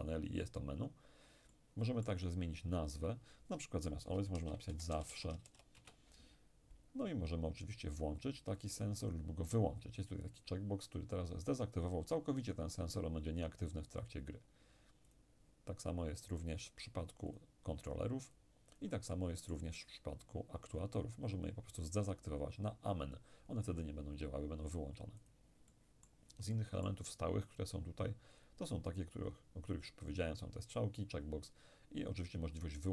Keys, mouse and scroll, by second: 1.5-4.0 middle drag, 3.0 click, 4.4-5.5 typing, 5.8 Return, 9.1 click, 15.1 click, 17.3-19.1 drag, 19.1-20.5 middle drag, 20.8-22.9 drag, 25.2 click, 25.7-27.9 middle drag, 28.4 click.